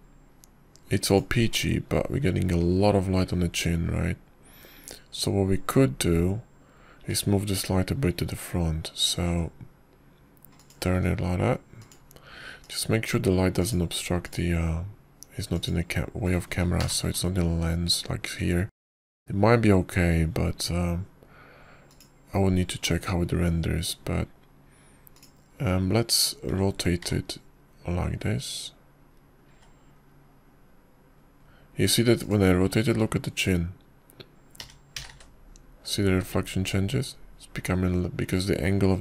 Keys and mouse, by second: 11.0 `, 11.0 r, 12.8 g, 14.5 click, 15.4 click, 16.1 click, 17.4 click, 18.7 ctrl+KP_0, 23.7 click, 27.0 click, 28.4 r, 36.5 r.